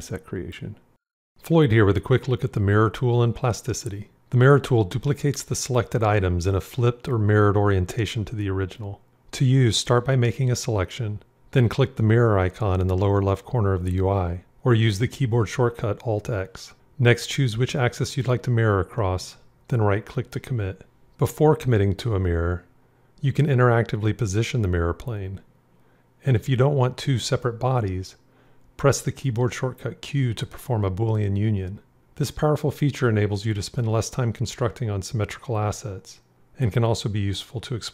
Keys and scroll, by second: 15.1 alt+x, 23.0 alt+x, 28.1 q, 33.5 alt+x.